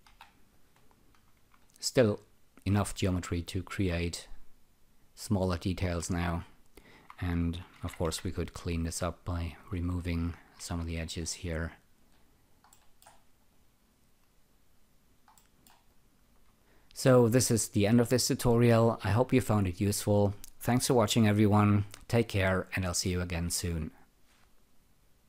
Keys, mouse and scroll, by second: 0.0 Delete, 0.5 click, 1.6 alt+right click, 2.9-5.7 alt+drag, 6.0 alt+right click, 7.7 Tab, 7.7 typing, 9.1 click, 9.3 double click, 9.7 shift+., 10.3 double click, 10.7 shift+., 11.0-11.5 scroll down 3, 11.6 alt+click, 12.1 alt+right click, 12.7 alt+middle click, 13.1 alt+right click, 13.4 alt+click.